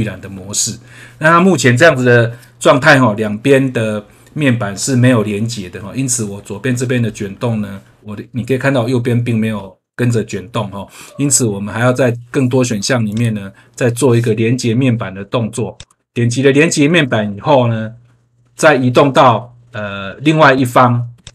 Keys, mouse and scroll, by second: 6.0 scroll down 1, 6.9 scroll up 1, 13.0 click, 15.7 click, 21.2 click.